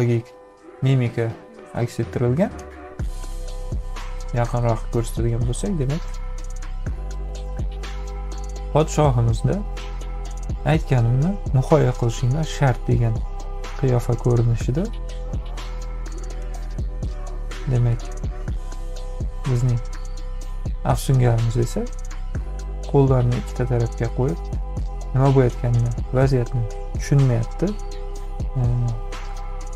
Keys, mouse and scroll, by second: 2.9 ctrl+=, 3.4 click, 3.7 space, 4.4 click, 5.0 click, 19.9 space, 20.1 click, 20.9-21.5 scroll up 2, 21.0 middle click, 21.3 click, 25.5-27.1 drag.